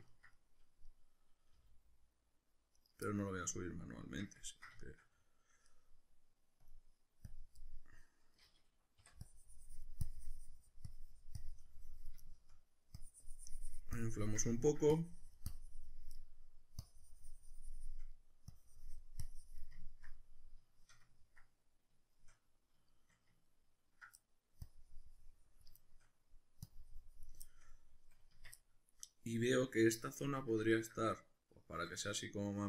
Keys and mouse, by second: 1.5 g, 2.9 right click, 4.0 Tab, 6.6-7.6 drag, 7.6-9.2 middle drag, 9.2-12.2 drag, 12.2 shift+middle click, 13.0-14.6 drag, 14.6 ctrl+middle click, 15.0-16.2 drag, 16.2 middle click, 16.8-18.2 drag, 18.2 middle click, 18.5-19.8 drag, 19.8-24.4 ctrl+middle drag, 24.6-25.8 drag, 25.8 shift+middle click, 26.7 click, 27.4-32.6 shift+middle drag, 28.3 Tab.